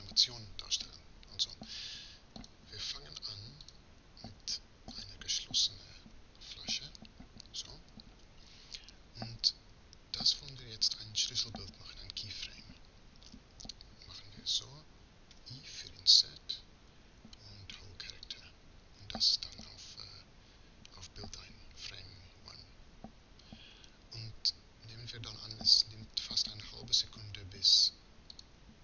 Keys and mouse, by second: 2.0-6.4 drag, 15.0 i.